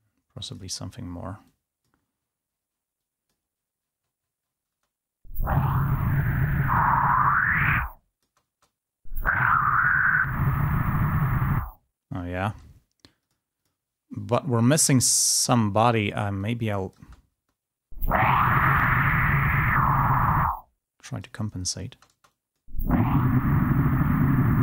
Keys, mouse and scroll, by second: 1.8 click, 2.2-3.5 scroll up 2, 3.5-5.0 scroll up 1, 5.0 space, 6.5-9.1 drag, 9.1 space, 9.4-12.1 drag, 13.4-15.6 drag, 16.8-18.8 drag, 18.8-19.7 scroll up 1, 19.7 click, 20.6-22.5 scroll down 1, 22.5 click, 22.5 space, 22.9-23.5 scroll up 1, 24.2-24.6 scroll down 2.